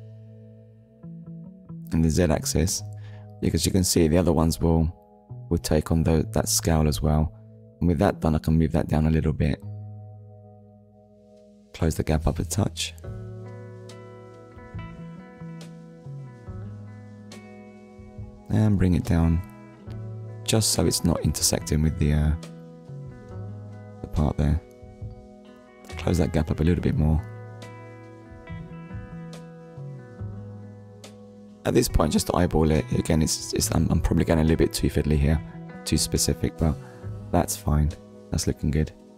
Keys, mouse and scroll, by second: 6.0 click, 7.6 Tab, 9.7 click, 11.1 click, 16.8-17.2 scroll up 1, 18.2 click, 23.1 click, 24.7 BackSpace, 24.8 2, 25.0 Return, 27.4 scroll up 1, 28.4 shift+middle click, 29.9 click, 30.2 shift+click, 33.9 scroll down 1, 34.9 click, 35.2 scroll down 1, 35.7 click, 36.0 middle click, 37.1 shift+middle click, 38.1 middle click.